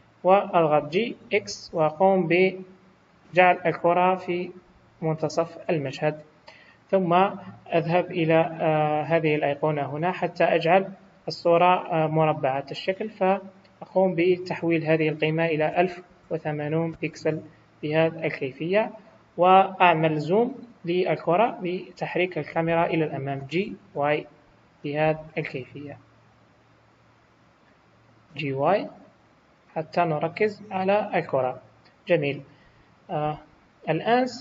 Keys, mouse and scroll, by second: 9.6 click, 13.2 click, 18.8 scroll down 1, 30.8-31.2 scroll down 3.